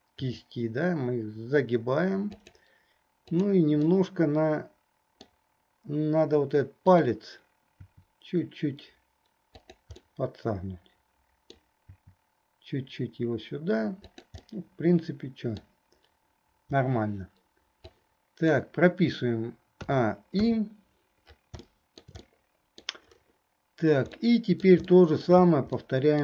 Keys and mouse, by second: 0.4 r, 3.5 click, 4.0-5.5 drag, 4.0-5.5 right drag, 6.9 click, 8.0 r, 10.3-11.8 drag, 10.3-11.8 right drag, 14.6-15.8 drag, 14.6-15.8 right drag, 17.9 click, 20.7 i, 21.9 shift+middle click, 22.4 middle click, 24.4 middle click, 25.0 shift+middle click, 26.0 middle click.